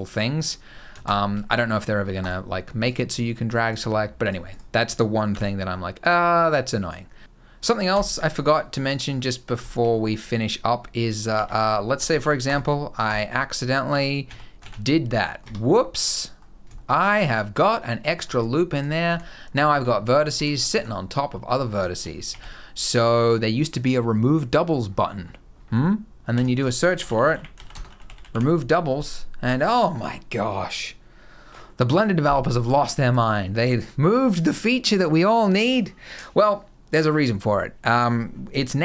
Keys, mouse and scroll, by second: 0.2 click, 0.8 shift+click, 1.9 click, 2.6 click, 3.3 click, 4.0 click, 4.2 click, 5.0 b, 6.2 click, 7.7 click, 8.3-8.9 scroll up 6, 8.9 middle click, 9.4 shift+middle click, 9.6 middle click, 11.1 Tab, 11.8 ctrl+r, 13.6 a, 14.0 a, 15.0 middle click, 15.2 Tab, 15.4 middle click, 16.1 scroll up 2, 16.5 shift+middle click, 16.7 middle click, 17.4-17.7 scroll up 1, 17.7 middle click, 18.0 Tab, 18.5 click, 18.8 g, 19.9 click, 20.1 g, 20.8 scroll down 2, 21.1 middle click, 21.3 scroll up 1, 21.6 shift+middle click, 21.9 scroll down 2, 22.0 a, 22.5-23.8 scroll down 1, 24.6 scroll down 4, 24.9 scroll up 6, 26.1 F3.